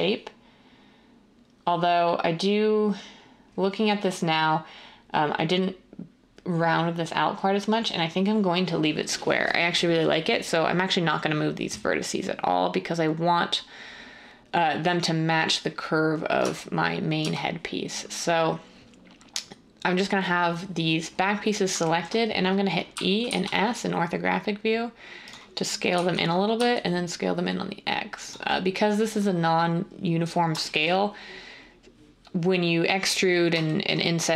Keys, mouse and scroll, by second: 16.4 Tab, 17.2 Tab, 22.9-23.2 typing, 25.7-26.6 typing.